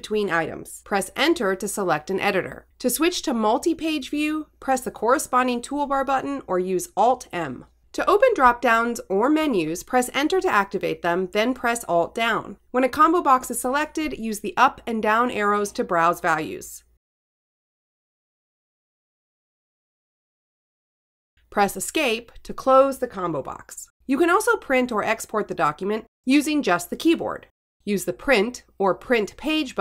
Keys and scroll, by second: 0.9 Return, 1.9 Right, 3.2 Return, 5.5 alt+m, 8.7 Right, 9.5 Return, 10.4 alt+Down, 12.1 Down, 13.9 Return, 15.8 Down, 21.7 Escape, 25.8 Right, 27.2 Return.